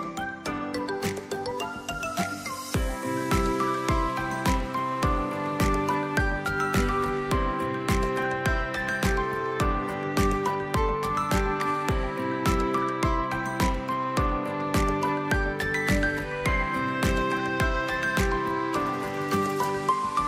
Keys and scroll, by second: 11.2 space, 12.7 v, 16.1 space, 19.6 shift+x, 19.9 v.